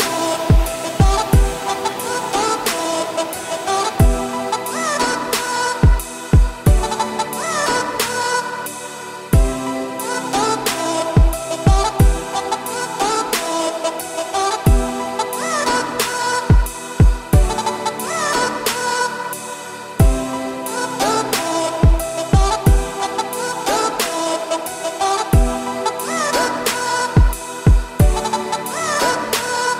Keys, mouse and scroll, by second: 0.2 g, 2.1 z, 2.7 g, 4.5 `, 4.9-5.9 scroll up 6, 5.5 shift+middle click, 5.9 g, 8.6-9.1 scroll down 6, 8.8 click, 9.1-9.8 middle drag, 9.8-10.7 scroll up 5, 10.7 click, 11.1-11.8 middle drag, 11.8 g, 12.7 scroll down 2, 12.8-13.7 middle drag, 13.7 click, 14.7 scroll down 4, 14.9 r, 16.3 scroll down 3, 16.5-16.9 middle drag, 16.9 click, 17.2-17.8 scroll down 10, 17.8 click, 18.1-18.4 middle drag, 18.4 scroll up 2, 19.2 click, 19.4 `, 19.8 scroll down 2, 20.0 middle drag, 20.3 g, 21.0-21.6 scroll down 10, 21.6-22.2 middle drag, 22.2 `, 23.4-23.8 scroll down 2, 23.8-24.2 shift+middle drag, 24.2 scroll up 2, 24.5-24.8 scroll down 1, 24.8-25.3 middle drag, 25.3-25.8 scroll down 10, 25.8 middle drag, 26.1-26.6 scroll up 4, 26.6 scroll down 1, 26.7-29.3 middle drag, 29.3 click, 29.7 click.